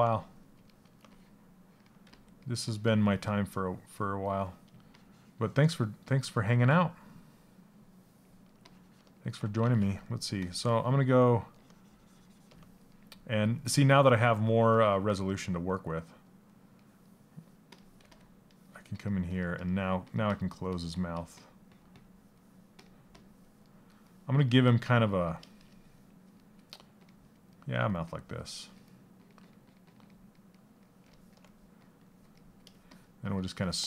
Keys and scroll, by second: 6.0 ctrl+z, 9.2 ctrl+z.